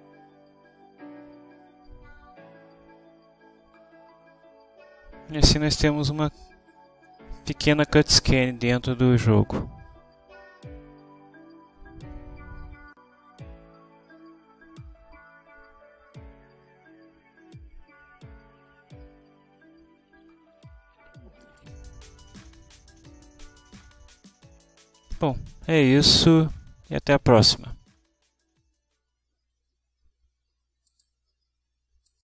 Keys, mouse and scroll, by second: 21.5 click, 26.2 click, 29.2 click, 32.2 click.